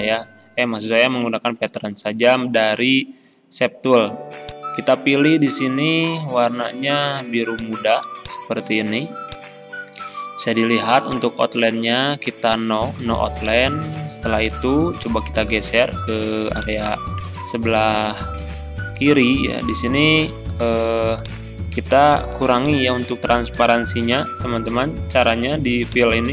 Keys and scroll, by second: 20.9 ctrl+z.